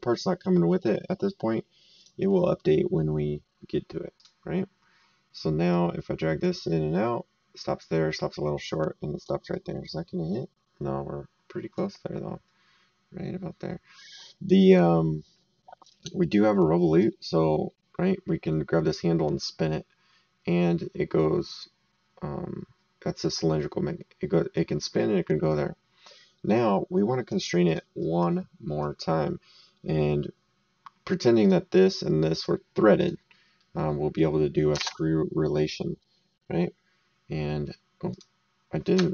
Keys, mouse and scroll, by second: 2.0 click, 4.1 click, 5.7 click, 9.5 right click, 14.2 right click, 17.0 click, 27.6 click, 28.0 right click, 31.4 click, 33.6 middle click, 34.8 alt+Tab, 38.1 click.